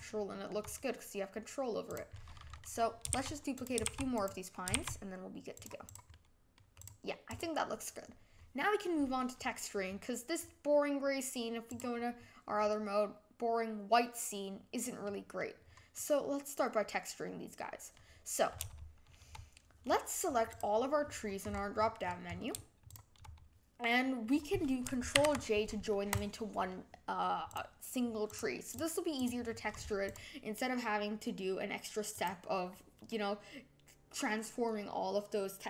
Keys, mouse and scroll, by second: 1.8 click, 2.1-2.6 middle drag, 2.6 scroll down 3, 3.1 shift+d, 3.8 shift+d, 4.7 shift+d, 5.8 click, 6.1-6.7 middle drag, 6.7 click, 7.2 click, 10.0-12.0 middle drag, 12.0 click, 12.6-15.5 middle drag, 15.5-15.9 scroll down 4, 15.9-18.9 middle drag, 20.4 click, 21.0-22.8 scroll down 27, 22.8 shift+click, 25.4 ctrl+j, 26.1 click, 26.6 scroll up 1, 26.7 middle click, 27.4 click, 28.2 click, 28.7 click, 29.1 click, 30.0 click, 32.1 click.